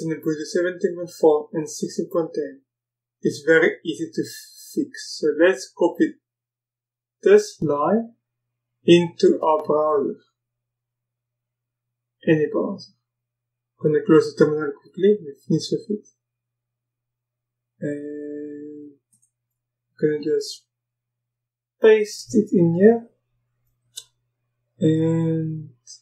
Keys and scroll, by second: 22.1 ctrl+v, 23.6 Return.